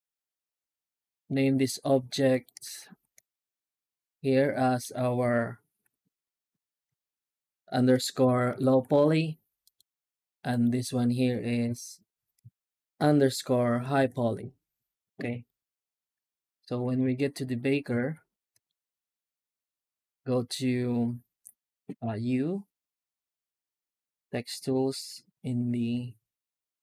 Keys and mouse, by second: 1.1 right click, 2.5 alt+shift+z, 3.0 right click, 3.3 alt+shift+z, 3.8-4.6 middle drag, 5.7 F2, 10.3 right click, 11.5 F2, 15.3 shift+right click, 16.0 alt+shift+z, 16.8 shift+right click, 17.5 right click, 17.8 alt+shift+z, 18.5 middle click, 18.9 right click, 20.1-21.9 drag.